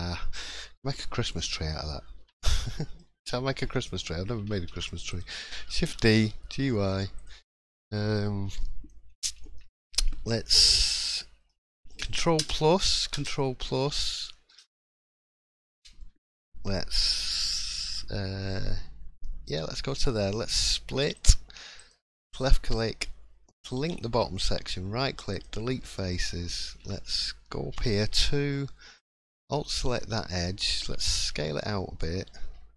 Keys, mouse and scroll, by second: 0.0-0.5 scroll down 2, 2.1 l, 2.7 middle click, 3.0 scroll down 1, 3.3 shift+middle click, 3.6 scroll up 1, 4.2-4.6 scroll up 1, 4.6 shift+d, 5.6 g, 7.6 scroll down 2, 7.9-8.6 scroll up 3, 8.4 middle click, 9.4 shift+middle click, 9.6-10.1 shift+scroll up 2, 10.1 shift+middle click, 10.8 click, 11.2 middle click, 12.4 ctrl+KP_Add, 19.5 right click, 21.7 click, 23.8 l, 24.3 right click, 25.8 middle click, 26.2-26.5 scroll up 4, 26.6 shift+middle click, 26.9 scroll up 1, 27.7 2, 29.0 alt+click, 29.4 middle click, 29.8-30.2 scroll down 4, 30.2 middle click, 31.3 s.